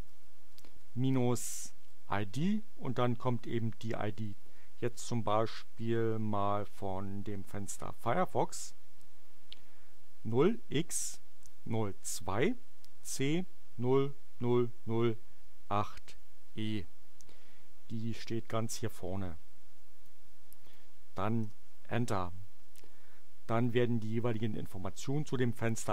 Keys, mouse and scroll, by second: 0.0-1.7 typing, 8.9 space, 10.0-11.7 typing, 12.9 c, 13.6 0, 14.2 0, 15.7 8, 16.0 e, 18.6-20.2 drag, 20.6 click, 21.4 Return.